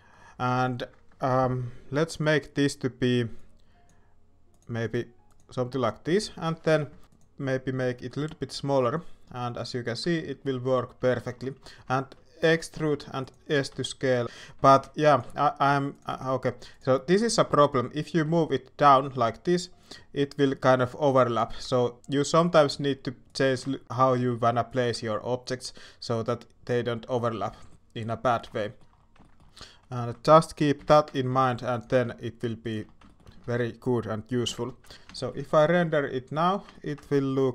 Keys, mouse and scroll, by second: 6.9 s, 7.9 shift+middle click, 8.6 shift+middle click, 10.1 shift+middle click, 11.1 shift+middle click, 11.9 shift+middle click, 13.7 s, 14.7 shift+d, 15.2 s, 16.0 g, 17.2 shift+middle click, 18.1 g, 21.5 g, 22.7 s, 23.4 g, 24.2 s, 24.8 g, 27.7 shift+middle click, 28.5 shift+middle click, 29.2 shift+scroll up 1, 29.2 shift+middle click, 29.9 alt+a, 30.7 l, 31.3 s, 31.8 g, 33.0 shift+middle click, 33.4 alt+a, 34.4 l, 34.9 Tab, 35.1 shift+middle drag, 35.8-36.3 shift+middle drag, 36.7 middle click.